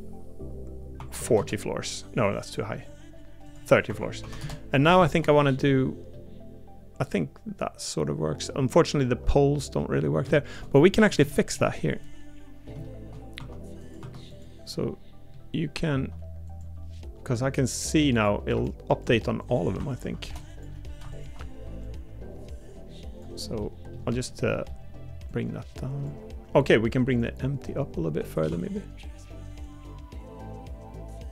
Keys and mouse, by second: 5.3 middle click, 6.1-8.5 middle drag, 9.0 Tab, 9.5 middle click, 10.3 shift+middle click, 10.8 middle click, 11.3 shift+middle click, 12.0 middle click, 12.8 shift+middle click, 13.4 Tab, 14.0 Tab, 14.7 middle click, 23.6 middle click, 24.2 middle click, 28.5 Tab.